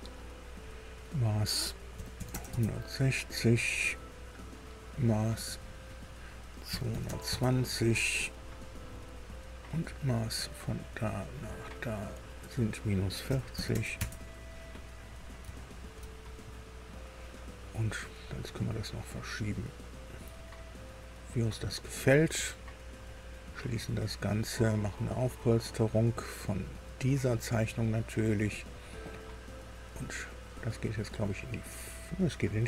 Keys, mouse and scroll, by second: 0.5 click, 1.9 KP_1, 2.1 KP_6, 2.2 KP_0, 2.4 KP_Enter, 4.4 click, 5.4 click, 6.6 KP_2, 6.8 KP_2, 7.0 KP_0, 7.2 KP_Enter, 9.6 click, 10.8 click, 12.1 click, 13.2 KP_Subtract, 13.5 KP_4, 13.6 KP_0, 13.9 KP_Enter, 15.0 scroll down 2, 15.4 shift+middle click, 16.2-18.6 shift+scroll up 3, 18.6-21.7 drag, 23.0 click, 26.7 scroll down 2, 28.2 click, 30.4-32.6 middle drag.